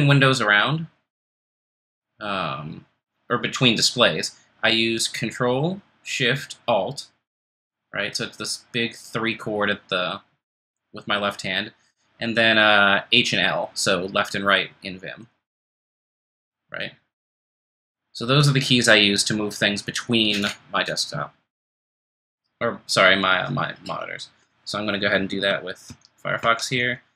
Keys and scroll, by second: 26.4 ctrl+shift+Left, 26.7 ctrl+shift+Left.